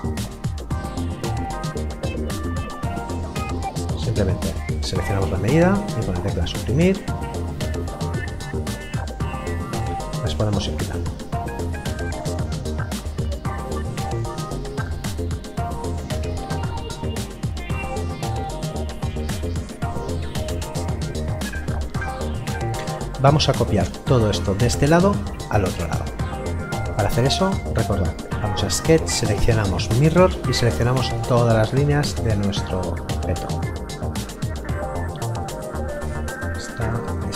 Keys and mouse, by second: 1.5 click, 3.1 Delete, 4.7 click, 5.1 Delete, 5.9 click, 6.1 Delete, 6.7 click, 6.8 Delete, 8.2 click, 8.6 Delete, 9.1 click, 9.4 Delete, 10.9 click, 11.1 Delete, 11.8 click, 12.0 Delete, 12.6 click, 13.1 Delete, 13.6 click, 14.0 Delete, 14.5 click, 15.3 Delete, 15.6 click, 15.9 Delete, 26.9 click.